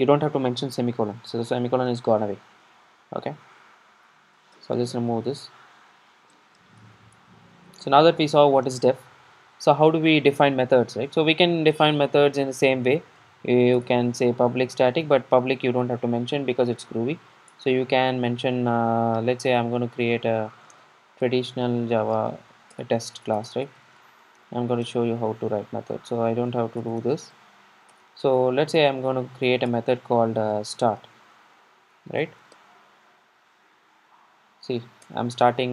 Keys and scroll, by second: 13.9 Return, 19.5 super+a, 25.0 Tab, 26.9 alt+Return.